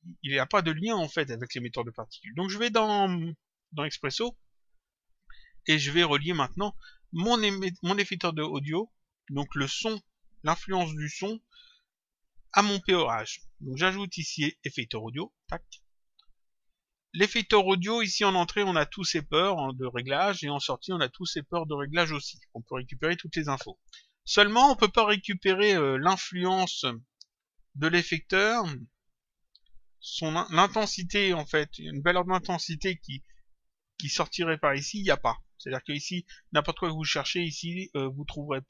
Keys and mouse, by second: 0.1 click, 3.4 click, 14.3 click, 16.6 click, 18.6 click, 20.3 click, 24.6 click, 35.3 click.